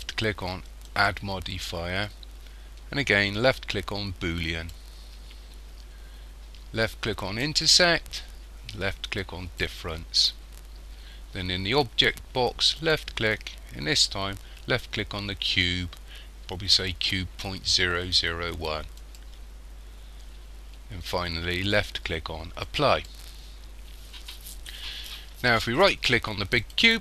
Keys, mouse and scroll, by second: 0.9 click, 7.3 click, 12.8 click, 22.7 click, 26.6 right click.